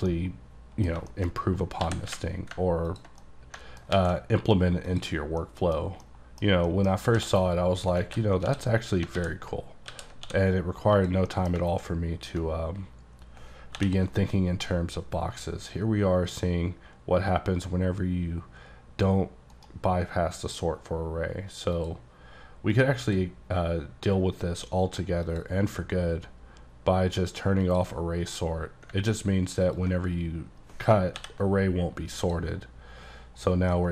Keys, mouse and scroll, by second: 0.2 middle click, 1.5 scroll up 2, 1.9 g, 2.1 y, 2.6 ctrl+t, 3.0 click, 3.2 click, 3.3 middle click, 3.8 alt+scroll down 1, 4.0 alt+x, 4.9 click, 5.2 scroll down 3, 5.5 middle click, 6.1 middle click, 6.7 middle click, 7.0 scroll up 3, 7.2 d, 8.1 alt+w, 8.5 d, 9.2 alt+w, 10.0 alt+w, 10.3 d, 11.0 click, 11.4 middle click, 11.7 ctrl+middle click, 12.3-13.8 ctrl+drag, 19.6 right click, 21.8 click, 23.1 click, 25.3 click, 27.7 click, 29.8 ctrl+click, 31.2 j, 33.8 middle click.